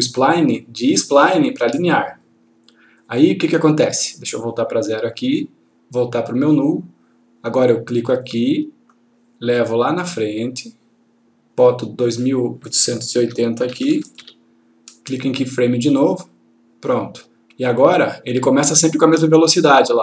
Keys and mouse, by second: 0.6 click, 4.4-5.3 click, 8.2 click, 10.2-11.5 click, 13.1 2, 16.3 click.